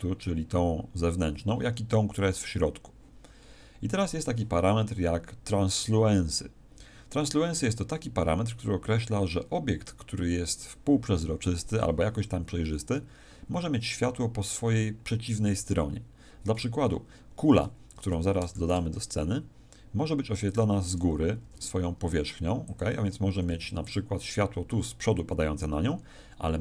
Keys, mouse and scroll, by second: 18.1 Escape, 18.1-18.4 scroll down 4, 18.6 shift+a, 21.4 g, 22.7 click, 23.5 s, 23.9 click.